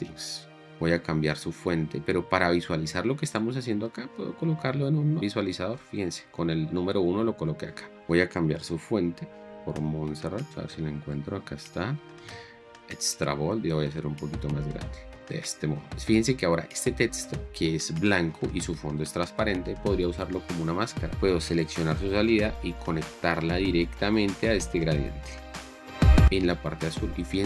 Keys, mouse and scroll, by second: 0.0-0.3 typing, 4.3 1, 6.4 1, 8.7 m, 15.4 click, 21.6 right click.